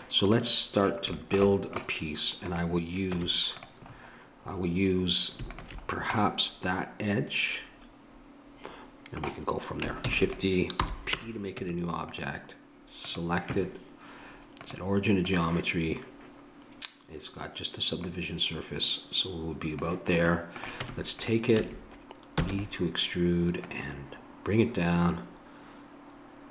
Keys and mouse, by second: 2.5 right click, 3.1 Tab, 4.1-8.8 right drag, 10.1 shift+d, 10.8 p, 11.6 Tab, 13.0-15.3 right drag, 15.3-20.8 drag, 20.8 Tab, 21.6 a, 22.4 e, 23.6-26.5 drag.